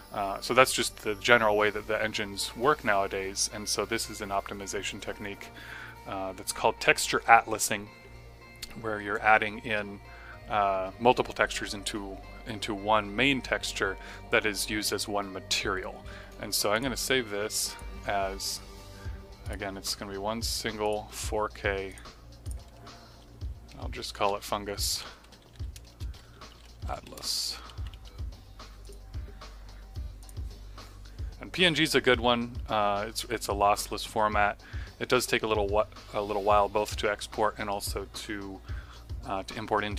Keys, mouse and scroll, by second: 16.7 click, 23.6 Home, 24.0-28.4 typing, 28.7 click.